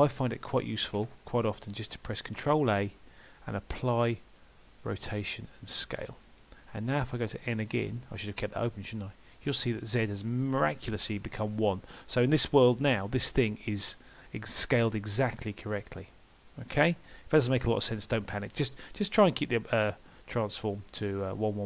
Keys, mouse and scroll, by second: 11.9 middle click, 14.1 middle click.